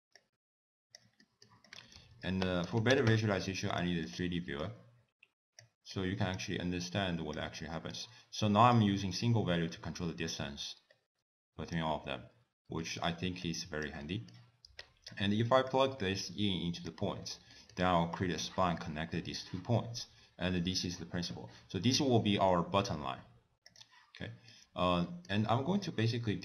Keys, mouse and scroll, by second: 0.2 click, 1.2 middle click, 1.7 click, 2.1 ctrl+a, 4.6 click, 5.9 click, 6.7 click, 7.6 middle click, 8.7 click, 12.4-12.8 scroll down 2, 12.8 middle click, 13.5 click, 14.1 middle click, 14.9 click, 15.7 click, 17.2-17.7 scroll up 3, 17.5 middle click, 18.1 click, 19.7 middle click, 20.2 scroll down 2, 20.6 middle click, 23.7 click, 24.2 middle click, 24.8 scroll down 2, 25.1 middle click, 25.9 click.